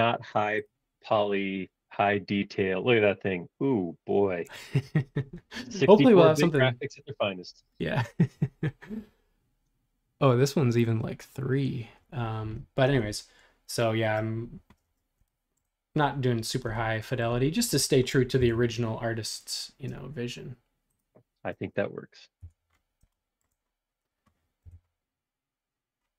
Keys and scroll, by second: 13.0 super+Tab, 18.4 l, 21.5 space, 22.4 BackSpace, 24.6 l.